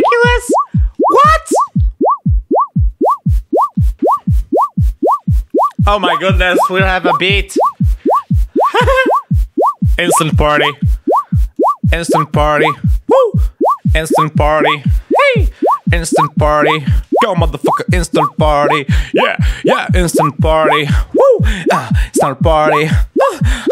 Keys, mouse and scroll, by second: 4.0 click, 11.5-12.6 drag.